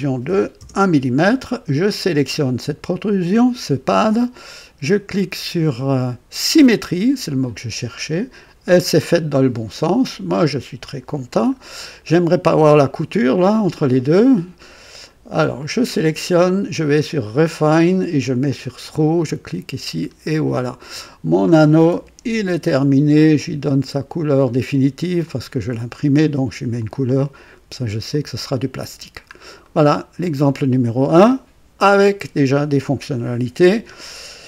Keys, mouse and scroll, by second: 0.2 KP_1, 0.5 KP_Enter, 2.9 click, 6.4 click, 10.8 click, 11.5 scroll up 1, 15.0 click, 17.1 click, 18.2 click, 18.8 click, 20.0 scroll up 2, 21.5 click, 22.2 ctrl+d, 24.0 click, 25.2 click, 26.1 click, 26.7 click, 28.0 click, 29.0-29.3 scroll down 1, 29.6-30.3 right drag.